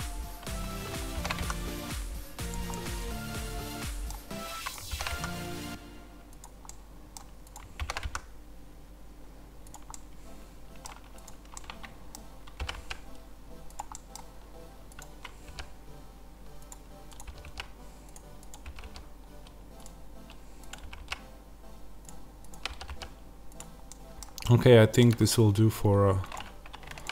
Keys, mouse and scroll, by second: 2.4 click, 2.7-4.6 middle drag, 4.6 click, 4.8 ctrl+b, 6.3 click, 6.6 middle click, 7.4 click, 7.7 ctrl+b, 9.6 click, 9.9-11.2 middle drag, 11.2 click, 11.4-13.7 middle drag, 12.5 g, 13.7 click, 13.8-14.9 middle drag, 14.9 click, 15.4 g, 16.6 click, 17.2 g, 18.4 click, 18.5 g, 19.7 click, 20.7 g, 21.9 click, 22.6 g, 23.5 click, 23.8-26.3 middle drag, 25.1 Tab, 26.3 click, 27.0 shift+click.